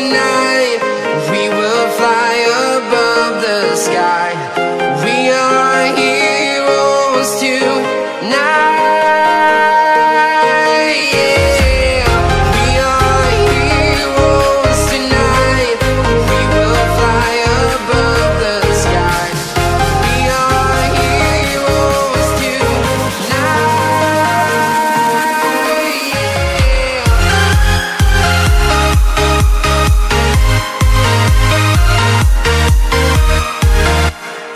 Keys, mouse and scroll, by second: 2.1 click, 3.3 click, 4.9 click, 7.5-10.0 typing, 10.7 click, 16.2 Tab, 16.7 click, 17.5 c, 17.6 Tab, 18.8 click, 19.0 Left, 21.1 click, 22.3 KP_Add, 22.8 KP_9, 24.2 Return, 24.4 KP_Add, 24.6 KP_9, 26.1 click, 28.3 alt+Tab, 29.3 click, 31.0 click, 31.3 Tab, 31.9 click, 32.5 Tab, 34.0-34.5 typing.